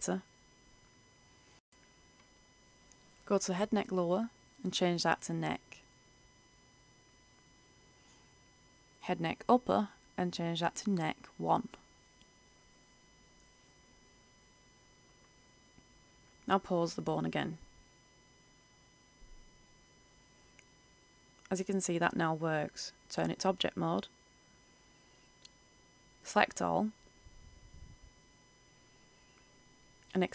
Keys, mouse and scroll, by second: 0.1 click, 1.6-3.4 scroll down 1, 3.4 click, 6.8-7.2 typing, 9.8 Return, 10.8 click, 12.0 shift+n, 12.2 shift+e, 12.3 shift+c, 12.5 shift+k, 16.2 click, 17.0 right click, 18.1 r, 20.3 click, 20.8 ctrl+z, 23.2 click, 26.8-27.6 scroll down 1, 27.6 scroll up 1, 28.4 a, 30.0-30.3 drag.